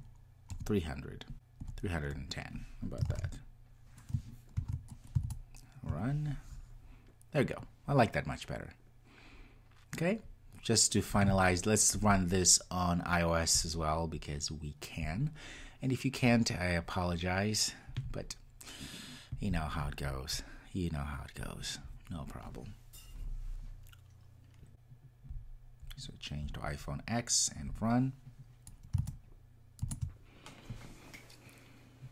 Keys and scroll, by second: 4.2 super+s, 4.5 ctrl+r, 27.7 ctrl+r.